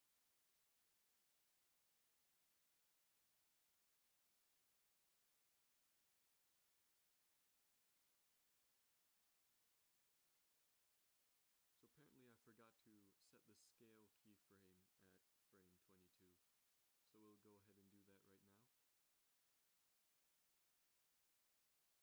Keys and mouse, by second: 0.2 Right, 0.4 Right, 0.6 Right, 0.9 Right, 1.1 Right, 1.4 Right, 1.6 Right, 1.8 Right, 2.1 Right, 2.3 Right, 2.5 Right, 2.7 Right, 3.0 Right, 3.2 Right, 3.5 Right, 3.6 Right, 3.9 Right, 4.0 Right, 4.3 Right, 6.7 z, 6.9 z, 8.0 z, 19.6 Left, 21.3 s.